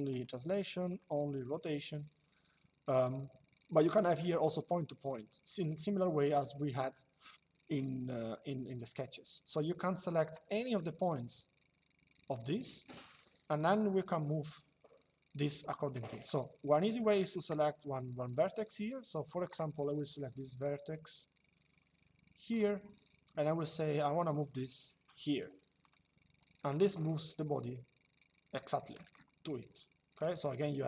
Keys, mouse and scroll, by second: 3.6 click, 22.3 click, 25.5 click, 29.9 click.